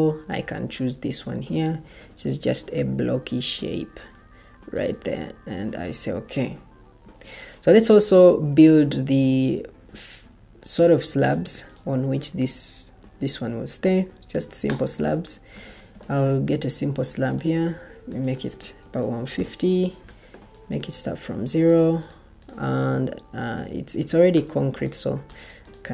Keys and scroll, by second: 6.9 Escape, 15.7 ctrl+t, 18.5-19.7 typing.